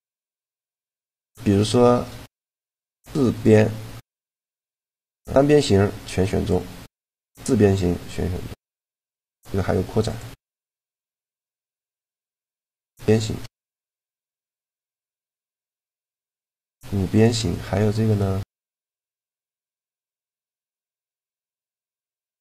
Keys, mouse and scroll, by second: 1.3-3.3 middle drag, 3.1-4.9 drag, 6.9-8.8 drag, 9.9-13.6 drag, 12.8-14.8 middle drag, 12.8 right click, 16.2 middle click, 18.0-19.6 right drag, 19.3-21.0 drag, 20.0-21.9 right drag, 21.2 shift+g.